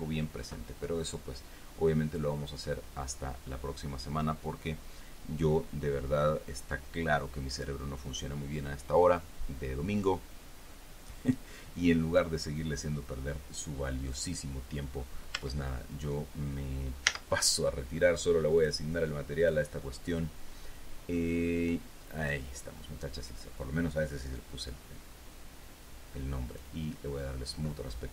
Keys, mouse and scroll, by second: 15.7 Tab, 17.4 z, 18.9 click, 19.7 click, 22.5 click, 25.0 scroll down 1, 26.9 click.